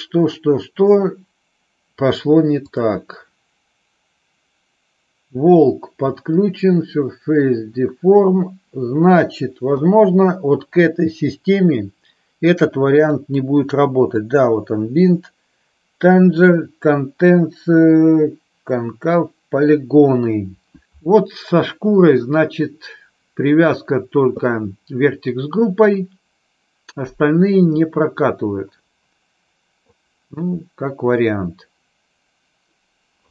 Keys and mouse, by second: 13.1 click, 14.2 click.